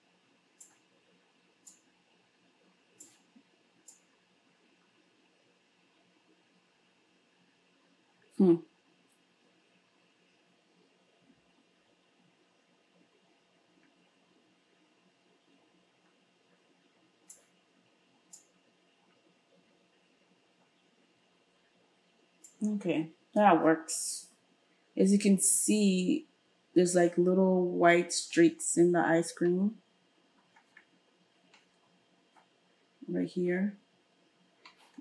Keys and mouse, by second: 2.0-5.5 drag, 5.5-35.0 middle drag.